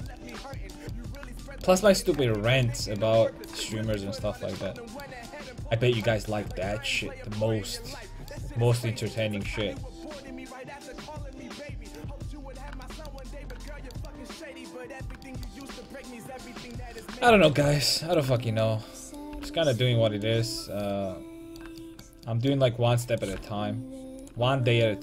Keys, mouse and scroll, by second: 1.2-2.9 middle drag, 4.6 middle click, 4.8 middle click, 6.2 Tab, 9.1-11.6 right drag, 9.7 g, 11.9 a, 12.3-13.8 middle drag, 23.7-25.0 right drag, 23.7 g.